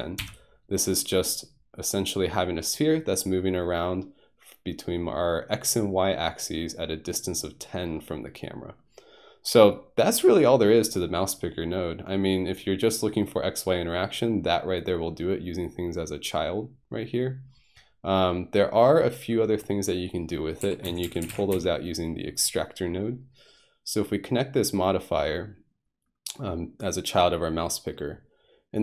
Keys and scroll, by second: 0.2 Home, 20.6-21.5 typing.